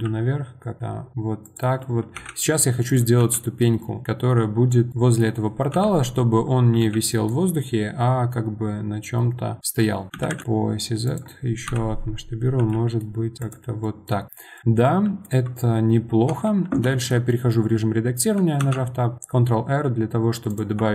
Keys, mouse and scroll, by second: 4.9 middle click, 5.7 KP_1, 9.8-14.2 middle drag, 14.2-15.1 scroll down 1, 15.1-15.7 scroll down 1, 15.7-16.3 scroll up 2, 16.3 Tab, 16.9 shift+middle click, 17.7 scroll up 1, 18.6 ctrl+r.